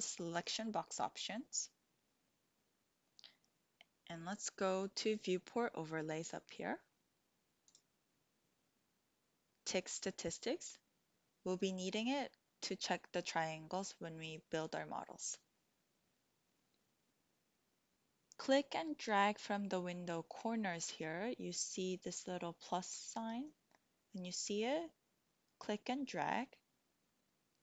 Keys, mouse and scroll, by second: 7.6-11.1 drag, 23.5-27.1 drag.